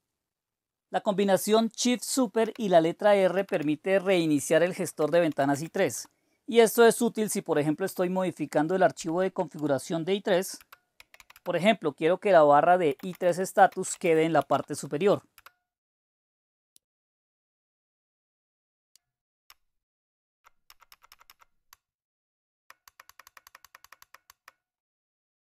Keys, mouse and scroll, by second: 1.4-3.5 typing, 4.8-5.9 typing, 7.8 typing, 9.0-9.5 typing, 10.6-16.0 typing, 16.7-19.0 Down, 19.4-20.9 Up, 21.7 Up, 21.7-22.8 Right.